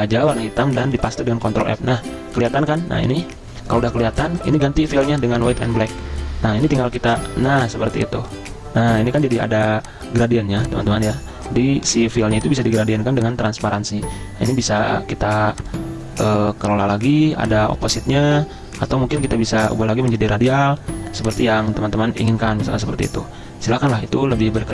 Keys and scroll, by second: 1.4 ctrl+f, 6.6 g.